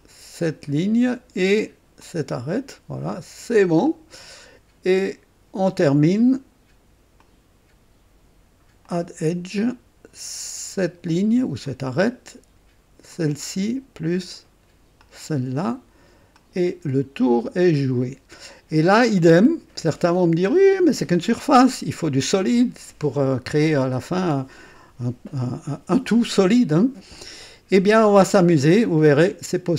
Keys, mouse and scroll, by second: 2.0 click, 3.8 click, 7.2 click, 8.8 click, 11.6 click, 13.1 click, 14.9 click, 16.3 click, 16.9-17.4 scroll down 2, 17.6 click, 18.8 right click, 19.4 click, 20.4-20.7 scroll up 1, 21.0 right click, 29.7 click.